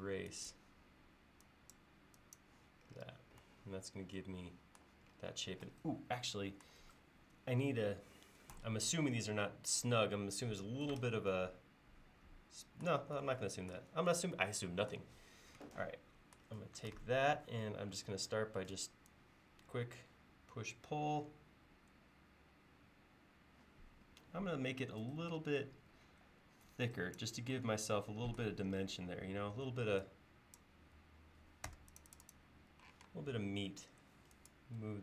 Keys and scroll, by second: 18.1 p, 31.8 space, 33.0 m.